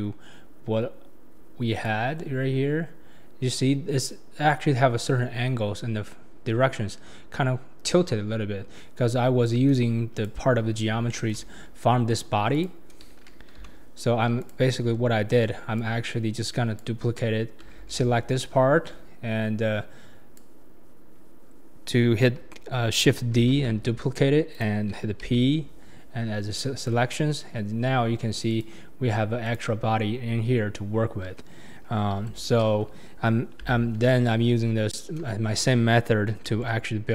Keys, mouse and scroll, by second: 1.9 click, 3.3-3.9 scroll up 2, 3.9-6.1 scroll down 2, 10.1 click, 10.6-11.0 scroll down 3, 11.1-12.5 shift+middle drag, 12.5 click, 13.6 h, 14.0 scroll up 3, 14.4 click, 14.8 Tab, 15.8 click, 17.7 alt+z, 17.7 click, 17.7 right click, 18.4 click, 20.7 scroll up 2, 21.1 scroll down 3, 23.6 shift+d, 27.2 p, 28.5 click, 29.4 click, 32.2 Tab, 33.6 h, 36.6 ctrl+z.